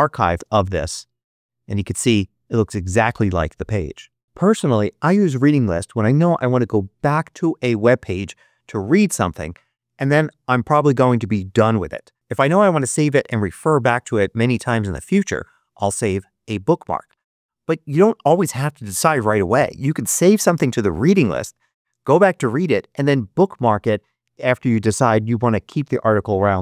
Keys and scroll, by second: 0.2 space.